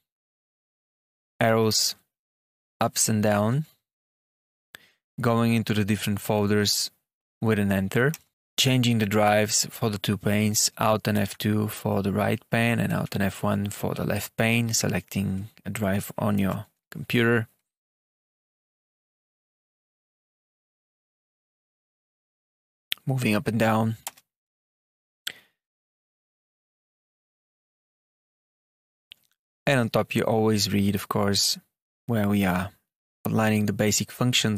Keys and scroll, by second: 3.2 Down, 11.1 alt+F2, 12.8 alt+F1, 14.8 Escape, 16.3 alt+F2, 18.1 Down, 18.1 Return, 19.2 Return, 21.0 Down, 21.5 Up, 23.9 Return, 25.5 Down, 26.5 Tab, 27.3 Down, 27.9 Down, 28.6 Return.